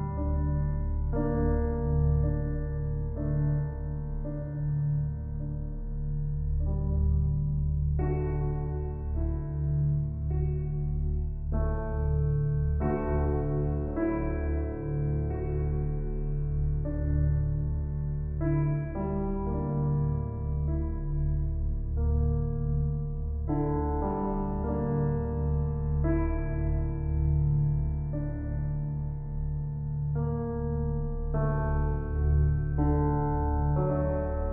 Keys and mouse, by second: 0.0-1.3 drag, 1.5 ctrl+alt+click, 1.9 ctrl+alt+click, 2.2 ctrl+alt+click, 2.5 ctrl+alt+click, 2.8 ctrl+alt+click, 3.2-5.0 alt+drag, 6.4 7, 7.0 ctrl+alt+click, 7.8 click, 9.0 alt+shift+click, 10.0 click, 10.5-12.4 drag, 12.4 alt+a, 13.3 typing, 13.4-15.1 drag, 15.1 Delete, 15.7-16.9 drag, 16.9 Tab, 17.8-19.4 ctrl+alt+drag, 19.4-19.8 typing, 21.1-24.9 drag, 26.0 r, 26.4 x, 26.9 9, 27.0 0, 27.7 Return, 29.6 typing, 30.7-33.4 drag, 33.4 typing.